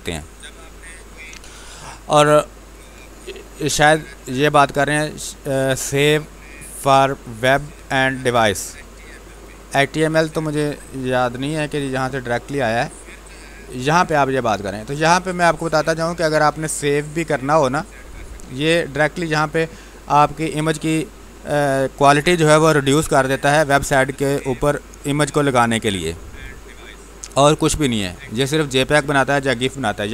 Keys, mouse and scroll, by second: 2.6 click, 6.9-11.2 drag, 11.2-14.3 drag, 14.9-16.5 drag, 16.5-17.8 scroll down 1.